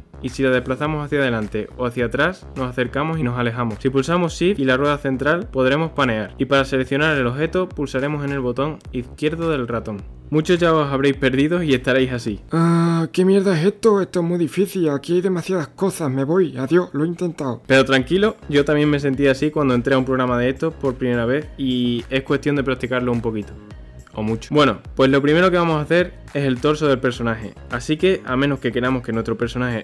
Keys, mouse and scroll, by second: 2.4-4.1 scroll down 1, 4.1-7.1 shift+middle drag, 7.8 click, 8.8 drag, 9.2 click, 9.9 click, 10.4 click, 12.1 click, 12.6 click, 14.1-15.5 drag, 16.5 ctrl+z, 17.4 click, 18.2 ctrl+z, 19.3-20.6 drag, 21.7 ctrl+z, 22.6 click, 23.7 click, 28.8-29.8 scroll up 1.